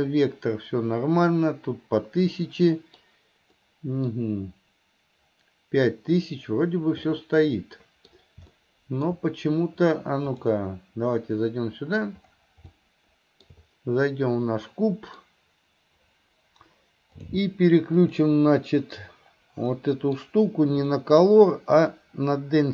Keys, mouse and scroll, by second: 11.6 middle click, 12.9 shift+middle click, 14.7 middle click, 17.2 click.